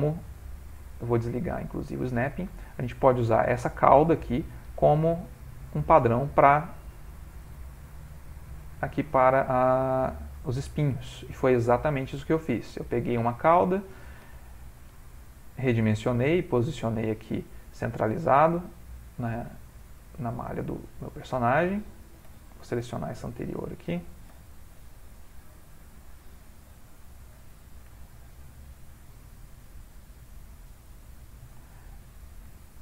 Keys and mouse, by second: 1.8 click, 2.4 g, 6.6 r, 7.8 g, 9.9 shift+middle click, 9.9 shift+middle click, 10.5 shift+middle click, 10.7 g, 12.1 r, 12.9 s, 14.2 g, 15.0 r, 16.0 g, 17.3 middle click, 21.1 click, 22.4 l, 23.1 click, 24.4 l, 25.1 click, 26.9 l, 27.5 click, 28.6 g, 29.4 click, 29.7 g, 30.5 click, 30.8 g, 31.7 shift+click, 32.1 click, 32.6 x.